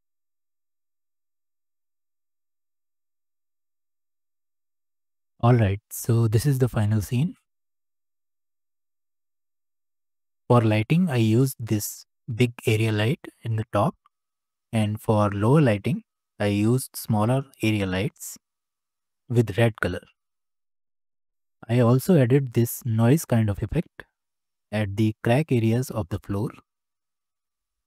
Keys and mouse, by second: 0.4 r, 1.3 click, 1.5 click, 1.9 e, 3.3 click, 3.9 Tab, 4.0 click, 4.5 space, 4.8-7.2 drag, 7.2-8.1 middle drag, 8.9-9.7 shift+middle drag, 15.5-16.0 shift+middle drag, 16.8-17.3 shift+middle drag, 20.4 g, 22.5 shift+h, 23.4 drag, 23.8-25.0 drag.